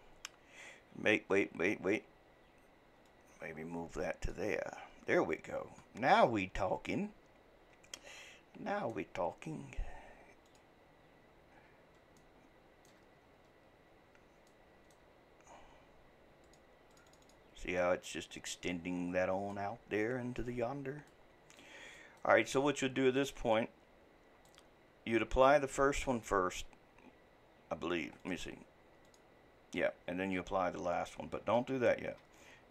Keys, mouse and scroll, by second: 6.1-9.1 middle drag, 10.5-11.7 drag, 11.7-12.2 scroll up 1, 12.2-13.1 shift+middle drag, 13.1-14.5 scroll down 7, 14.5-16.5 shift+middle drag, 16.5-17.8 drag, 17.8-20.8 shift+middle drag, 21.1-26.5 middle drag, 28.2-31.7 drag, 31.7 ctrl+z.